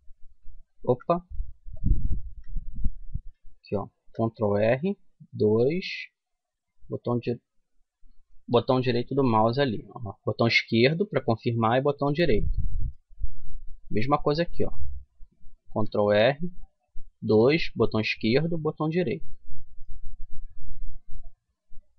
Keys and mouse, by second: 1.9 ctrl+z, 3.6 ctrl+r, 6.6 click, 6.9-8.5 right drag, 8.2 ctrl+r, 12.0 middle click, 15.3 ctrl+r, 19.1 middle click, 19.3-21.4 middle drag.